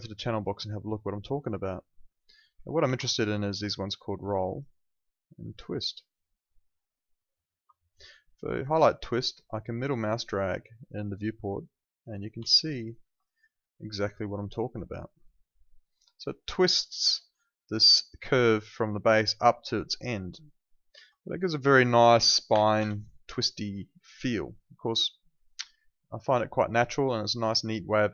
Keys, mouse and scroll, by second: 2.8 ctrl+2, 7.5 Escape, 8.6 click, 9.8 middle click, 12.5 alt+click, 12.8 alt+right click, 13.0 alt+middle click, 13.2 alt+click, 13.8 middle click, 21.5 click, 22.5 0, 22.8 Return, 23.9 alt+click, 25.5 alt+click.